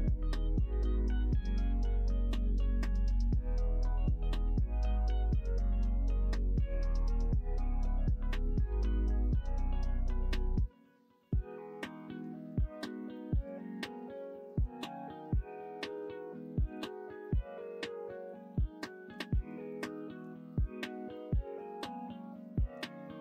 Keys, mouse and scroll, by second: 0.3 f, 0.7 middle click, 1.4 click, 1.7 middle click, 2.7 shift+click, 3.6 middle click, 4.3-5.8 middle drag, 5.6 ctrl+z, 5.8 ctrl+z, 5.9 ctrl+z, 6.3 middle click, 7.1 click, 7.4 middle click, 9.0 ctrl+r, 10.5 middle click, 11.1 middle click, 11.9 middle click, 13.3 click, 13.5 middle click, 14.7 middle click, 16.0 f, 17.3 middle click, 18.5 ctrl+z, 18.9 ctrl+z, 19.3 ctrl+z, 20.4 middle click, 21.1 middle click, 21.5 middle click, 22.7 k.